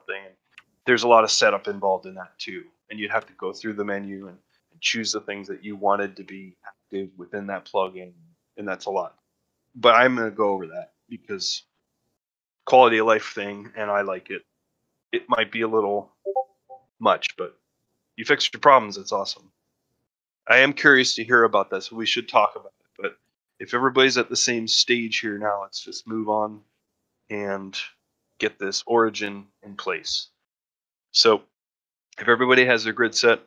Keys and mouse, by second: 27.1 middle drag, 27.5 shift+middle drag, 31.2 middle drag.